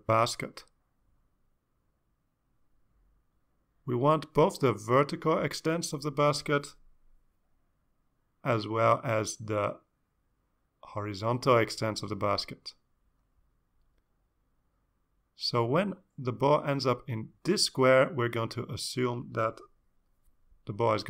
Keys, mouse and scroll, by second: 4.4 click, 5.8-10.9 drag, 13.5-18.2 drag, 19.2 click, 20.8 click.